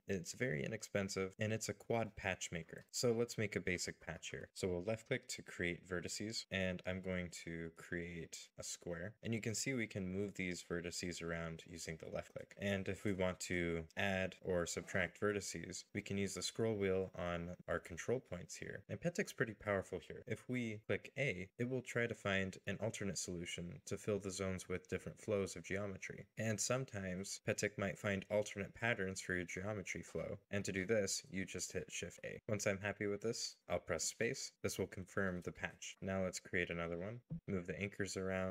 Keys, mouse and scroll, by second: 2.9 shift+middle click, 9.9-14.0 scroll down 1, 15.8-16.5 scroll down 1, 16.5-17.6 scroll up 1, 17.6-19.3 scroll down 1, 19.9 a, 20.5 a, 23.2-24.0 scroll down 1, 24.0 a, 25.0 a, 28.0 middle click, 29.7 scroll up 1, 32.4-33.1 scroll up 1, 33.1 space, 34.4 shift+middle click, 34.9 scroll up 1, 35.1 scroll down 1, 35.4 shift+middle click, 36.2 right click, 37.0 middle click.